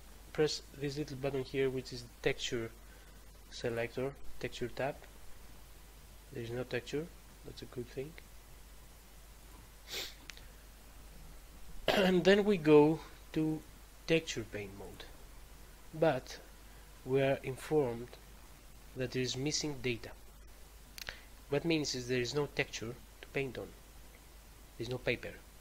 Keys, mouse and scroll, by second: 3.6 click, 9.3 click, 13.4 click, 14.8 click.